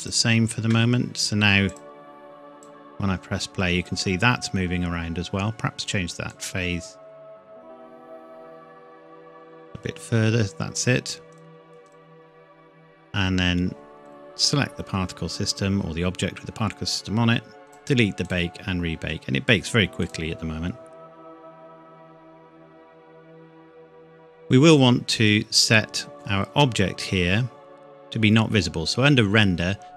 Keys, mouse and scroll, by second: 6.3 click, 11.4 click, 14.8 scroll down 1, 17.6 click, 25.8-26.8 scroll down 1.